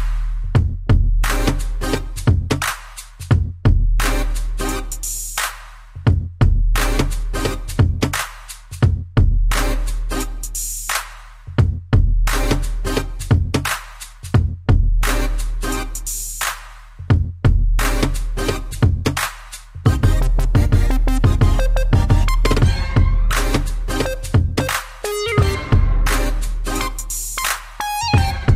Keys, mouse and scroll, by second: 0.0-0.2 typing, 2.1 click, 3.5 click, 3.6 click, 4.0 middle click, 6.8-7.2 scroll down 2, 7.9 middle click, 8.4 scroll down 2, 8.9 scroll up 2, 9.1 middle click, 9.7 middle click, 10.9 Right, 11.1 Right, 11.3 Right, 13.2 Up, 14.2-15.2 typing, 15.4 Down, 19.3 shift+click, 19.5 shift+click, 19.7 scroll down 1, 20.0 middle click, 20.7 ctrl+c, 21.6 Down, 22.0 Up, 22.9 Up, 24.2 ctrl+v, 26.0 Up, 28.0 1.